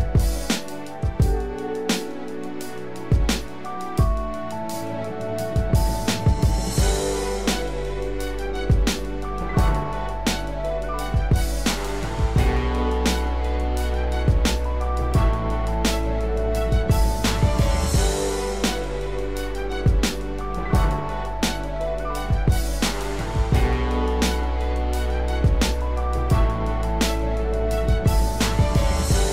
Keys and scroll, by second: 11.5 ctrl+-, 12.0 ctrl+=, 21.3 ctrl+z.